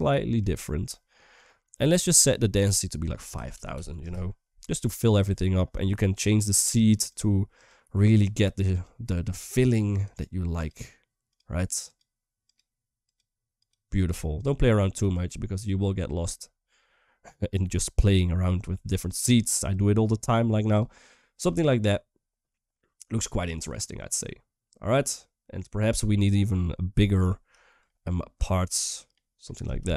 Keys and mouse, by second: 1.3 middle click, 2.3-3.8 drag, 3.8 0, 5.1 shift+middle drag, 6.1 click, 7.3 click, 7.9 click, 8.5 click, 9.1 click, 9.8 click, 10.3 click, 11.6 click, 12.2 click, 12.8 click, 13.4 click, 14.1 click, 14.7 click, 15.3 click, 16.6-17.3 middle drag, 18.8 click, 19.3 click, 20.9-22.8 middle drag, 23.4 click, 26.6 middle click, 26.9 middle click, 27.6-29.3 shift+drag.